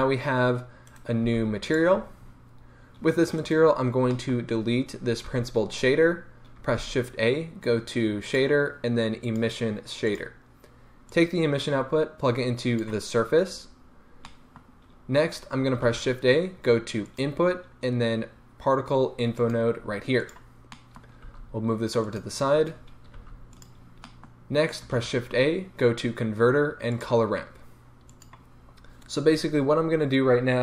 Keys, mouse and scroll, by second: 0.9 right click, 1.2 g, 1.8 click, 2.0-2.4 scroll up 1, 3.4 right click, 4.1-10.2 middle drag, 5.3 x, 6.7 shift+a, 10.2 click, 11.1-14.3 drag, 13.4-14.3 scroll up 2, 14.3-20.3 middle drag, 15.4-15.8 scroll down 2, 15.8 shift+a, 20.3 click, 20.7-22.2 middle drag, 21.3 g, 22.2 click, 22.8-23.2 scroll down 1, 23.2 g, 23.6 click, 24.0-28.3 middle drag, 24.9 shift+a, 28.3 click.